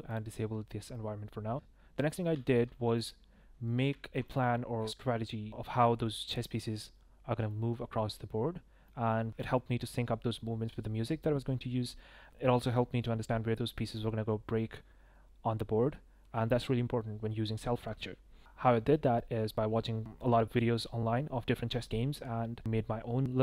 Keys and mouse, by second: 0.1 click, 2.0 ctrl+drag, 2.3 drag, 3.3 shift+drag, 3.6 click, 7.4 shift+drag, 8.5-8.9 drag, 9.3-10.4 drag, 12.3-13.9 drag.